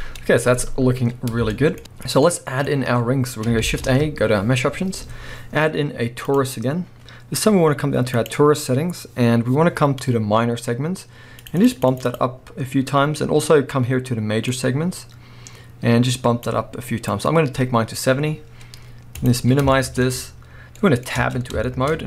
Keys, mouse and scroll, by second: 0.1-1.1 scroll down 1, 1.5-6.4 shift+middle drag, 1.8-2.2 scroll up 1, 2.7-3.3 scroll up 1, 3.6 shift+a, 8.1-19.7 drag, 19.7-21.2 shift+middle drag, 20.1-20.8 scroll up 1, 21.2 Tab, 21.9-22.0 scroll up 1.